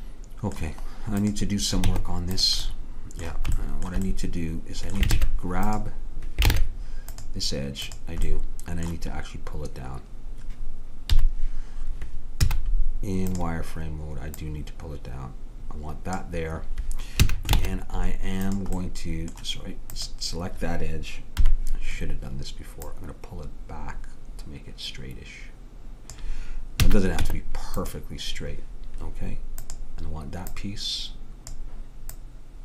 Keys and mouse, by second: 1.2 click, 1.9 Tab, 5.2 ctrl+Tab, 6.6 ctrl+Tab, 7.9-9.8 drag, 11.2 KP_3, 12.5 z, 14.4-16.3 drag, 17.3 a, 17.6 ctrl+Tab, 20.0-21.4 drag, 21.1 middle click, 21.4 KP_3, 26.9 a, 27.3 Tab, 29.7-32.6 drag.